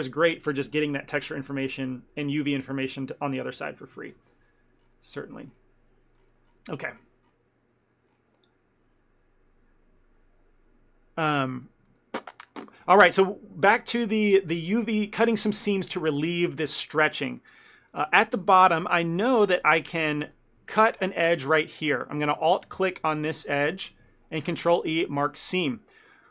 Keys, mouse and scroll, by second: 11.6 middle click, 12.0 ctrl+middle click, 17.9 shift+middle click, 18.1 ctrl+middle click, 18.6 middle click, 18.9 shift+middle click, 19.3 ctrl+middle click, 19.6 middle click, 20.0 shift+middle click, 20.3 ctrl+middle click, 21.4 alt+click, 22.0 shift+middle click, 22.3 ctrl+middle click, 23.3 alt+click, 24.7 ctrl+e.